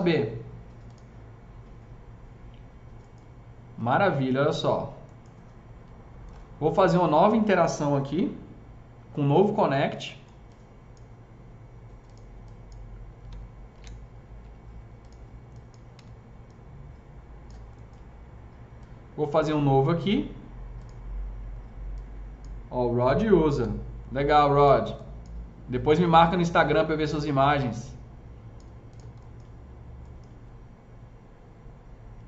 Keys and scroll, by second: 13.6 ctrl+shift+e, 15.8 s, 23.4 ctrl+shift+e.